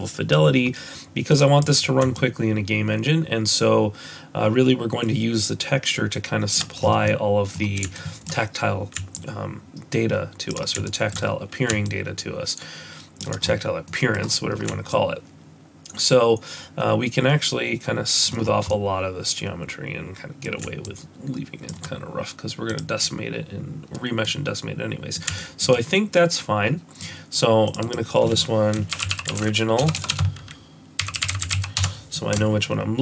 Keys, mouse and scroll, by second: 23.5 shift+click, 24.3 middle click, 25.4 shift+middle click, 25.7 middle click, 27.7 click, 27.8 click, 29.3 i, 30.0 BackSpace, 30.1 BackSpace.